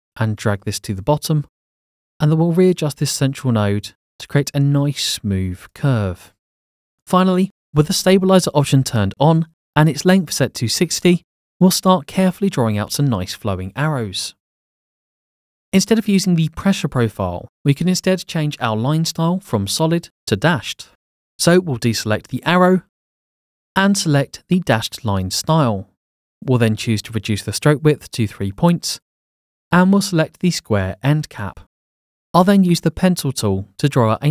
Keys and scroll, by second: 10.0-11.0 typing, 22.1 Escape, 28.0 3.